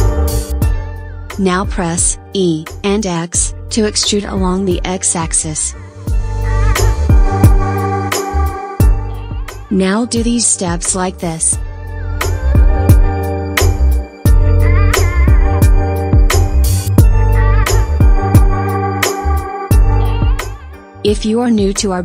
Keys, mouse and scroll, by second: 0.1-1.8 shift+middle drag, 1.8 e, 5.9-7.3 scroll down 5, 8.8-9.4 scroll up 1, 9.4-10.0 scroll down 1, 10.0-11.4 middle drag, 10.0 scroll up 1, 11.4-12.7 drag, 13.1 KP_3, 14.0-14.6 scroll up 5, 14.6-15.7 scroll up 4, 15.7-16.8 scroll up 1, 16.8-17.5 scroll down 1, 17.5 Tab, 20.8 click.